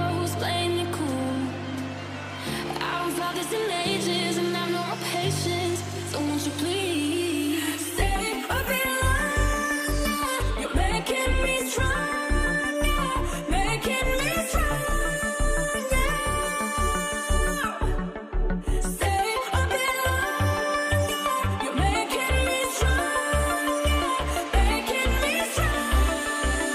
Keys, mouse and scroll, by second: 2.4-4.0 typing, 15.3 alt+BackSpace, 16.0 typing.